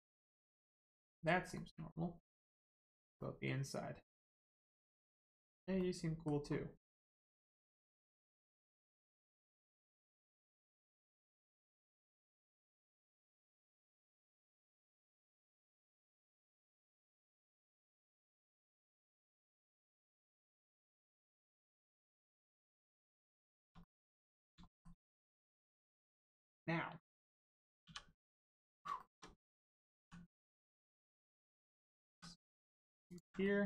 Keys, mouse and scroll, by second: 2.7 shift+middle click, 3.2 middle click, 3.2 middle click, 5.2 scroll up 1, 5.3 scroll down 1, 5.8 middle click, 6.4-6.8 scroll up 1, 6.8 middle click, 8.3 scroll down 1, 8.7 middle click, 10.8 click, 11.2 middle click, 12.2 shift+middle click, 13.2 middle click, 13.2 middle click, 15.5-15.9 scroll down 1, 16.3 middle click, 17.0 shift+middle click, 17.6 middle click, 17.6 middle click, 19.4-20.1 scroll up 1, 20.1 click, 20.4 middle click, 20.8 shift+middle click, 21.1 scroll up 1, 21.6 middle click, 22.2 shift+middle click, 22.8 middle click, 22.8 middle click, 23.5 shift+middle click, 23.8 middle click, 24.6 shift+middle click, 25.0 middle click, 25.0 middle click, 27.9 2, 28.2 click, 28.6 middle click, 28.9 shift+middle click, 29.5 middle click, 29.6 middle click, 31.0 right click, 31.8 middle click, 32.1 e, 33.1 ctrl+click, 33.4 middle click.